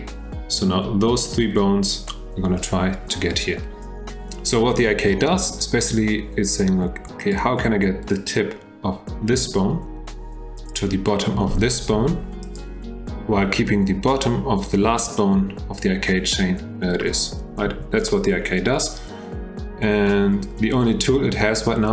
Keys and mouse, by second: 8.1 click, 10.6 click, 11.9 g, 17.6 g.